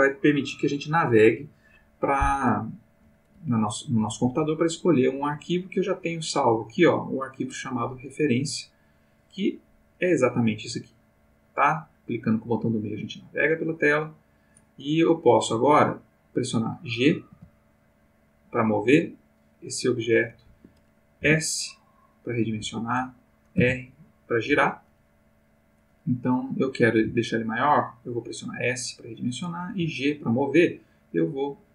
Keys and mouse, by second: 4.6-5.5 drag, 6.0 click, 8.7 click, 10.4-13.5 middle drag, 14.4 click, 17.3 g, 20.5 Escape, 21.2 s, 22.6 Escape, 23.6 r, 24.5 Escape, 27.0 s, 29.3 click, 29.7 g.